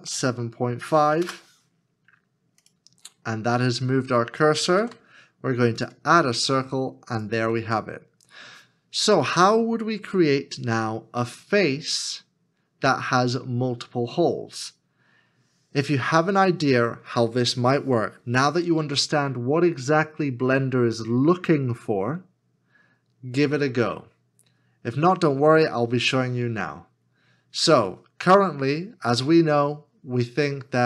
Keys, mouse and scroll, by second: 0.0-0.1 typing, 1.2 Return, 4.6 Return, 6.6 shift+a.